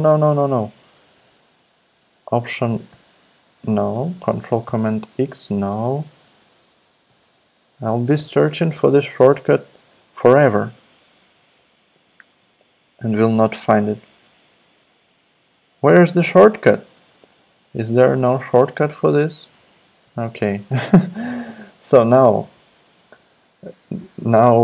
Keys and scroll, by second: 2.9 alt+super+x, 2.9 ↺, 4.6 alt+super+x, 7.0 ctrl+alt+x, 8.2 ctrl+alt+s, 9.2 ctrl+alt+u.